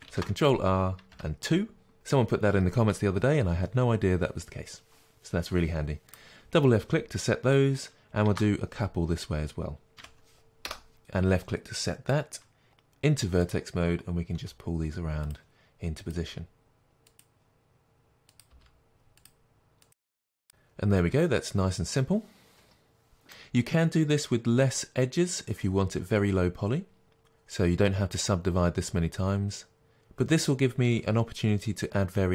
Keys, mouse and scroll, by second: 0.1 ctrl+r, 6.1 click, 11.0 click, 12.7 1, 13.5 click, 14.4 g, 15.4 click, 16.2 g, 17.1 click, 17.2 g, 17.3 click, 17.5 g, 18.0 click, 18.1 g, 18.2 click, 19.6 g, 19.7 click, 19.8 g, 20.0 click, 20.4-32.3 middle drag.